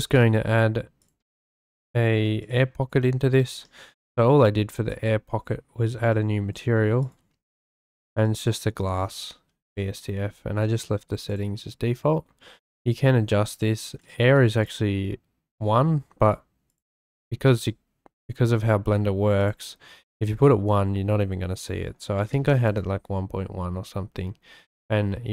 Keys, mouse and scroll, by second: 0.3 click, 2.4 click, 3.3 click, 3.6-3.9 scroll, 4.9 click, 6.1 click, 7.0 click, 7.2 x, 8.3-8.7 drag, 11.3 click, 12.8 click, 14.0 click, 16.7-19.4 drag, 20.1-22.7 drag.